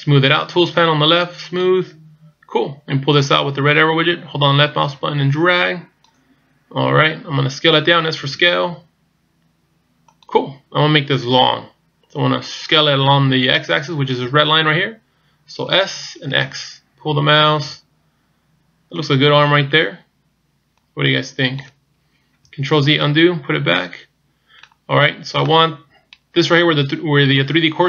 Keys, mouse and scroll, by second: 1.7 click, 3.3 click, 8.2 s, 15.7 s, 20.8 click, 22.9 ctrl+z, 23.7 middle click, 24.9-25.5 scroll up 2, 25.5 middle click, 25.5-26.1 scroll up 1.